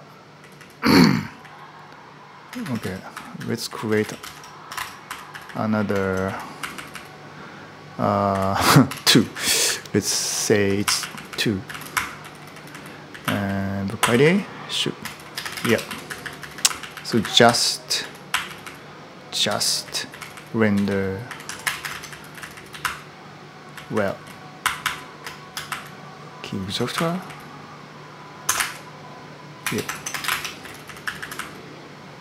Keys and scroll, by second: 0.0-1.2 typing, 2.3-6.9 typing, 8.1-28.3 typing, 29.4 Return, 29.4-31.6 typing, 29.7 ctrl+Home.